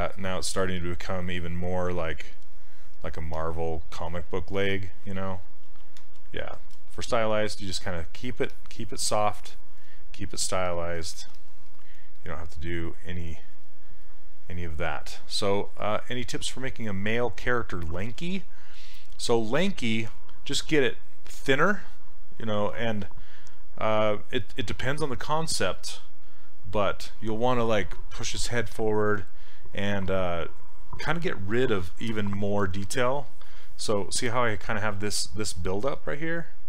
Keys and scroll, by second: 5.7 ctrl+z, 6.0 ctrl+z, 11.3 s, 35.9 s.